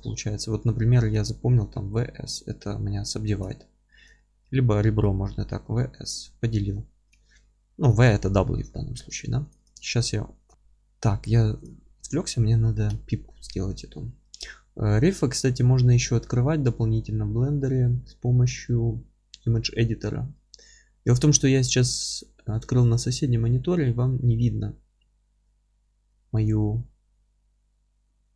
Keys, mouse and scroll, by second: 0.8 3, 1.1 click, 1.4-5.0 middle drag, 2.0 w, 2.9-3.3 scroll down 1, 3.5 ctrl+z, 4.4 2, 5.0 click, 5.8 w, 6.2 scroll up 1, 6.5 1, 6.9-9.2 middle drag, 7.2 ctrl+z, 9.6 click, 9.9 ctrl+x, 10.5-11.6 middle drag, 11.1 3, 11.6 click, 11.8-12.2 scroll up 1, 12.2-20.4 middle drag, 20.4-28.3 drag.